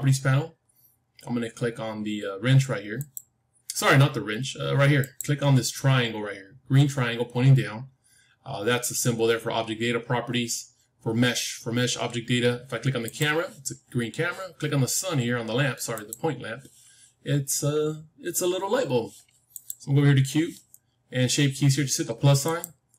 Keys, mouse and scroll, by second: 2.9-7.0 drag, 5.3-7.6 middle drag, 11.5-13.0 middle drag, 13.0-17.9 drag, 19.4-21.4 drag, 22.4-22.9 drag.